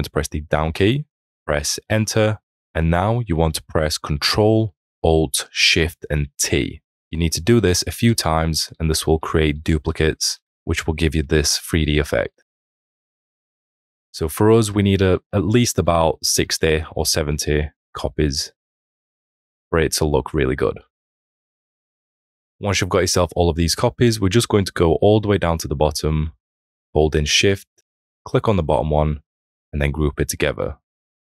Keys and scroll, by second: 0.5 Down, 2.3 Return.